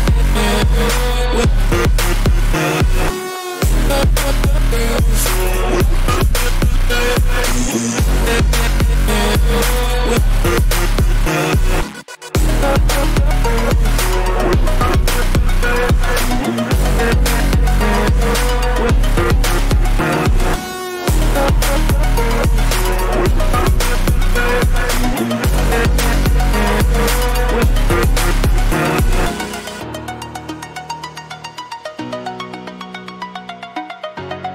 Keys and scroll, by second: 7.3 ctrl+alt+z, 7.5 ctrl+-, 7.6 ], 12.9 ctrl+-, 13.9 Return, 21.8 ctrl+t, 27.2 Return.